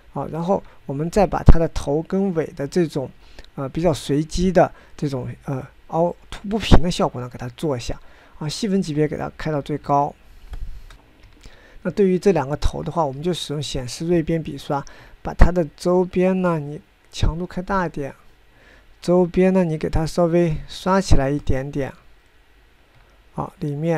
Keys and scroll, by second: 12.7 9, 14.6 f.